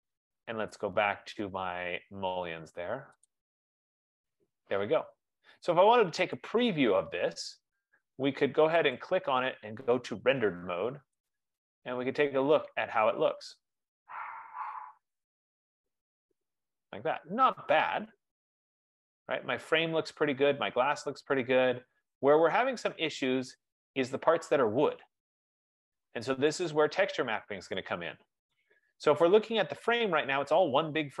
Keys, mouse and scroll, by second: 3.6 click, 6.6 click, 9.2 click, 11.5 click, 12.3 F15, 16.5 click, 26.7 right click, 27.2 middle click, 27.3 middle click, 28.7 right click, 29.7 click.